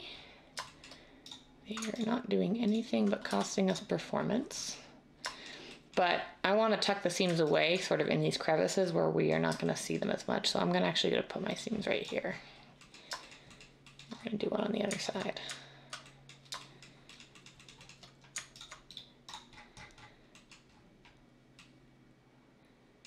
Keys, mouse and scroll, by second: 3.3 x.